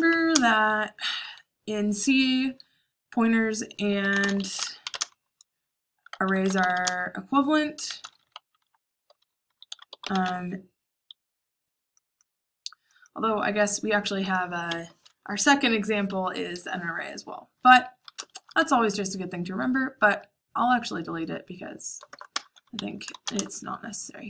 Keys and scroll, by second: 0.0-0.7 typing, 3.6-10.9 typing, 11.1 Escape, 14.6 Escape, 15.5-16.0 typing, 18.3-22.3 typing.